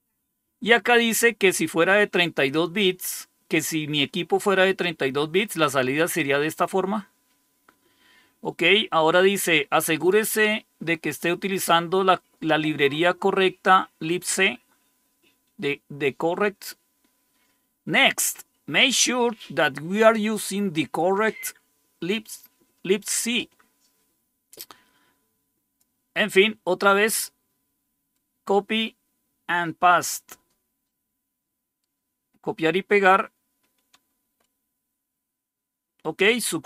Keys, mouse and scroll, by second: 7.4 scroll down 1, 8.1 scroll down 1, 24.4-25.7 drag, 27.0-28.0 right drag, 30.0-31.6 right drag, 31.7-34.1 right drag, 34.1 Return.